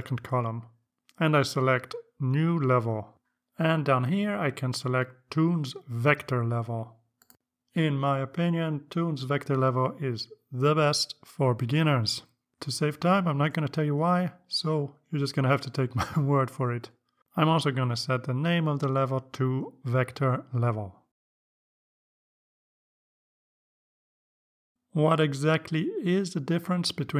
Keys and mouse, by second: 0.8 click, 3.5 click, 6.1 click, 15.4 click, 21.1-24.5 typing.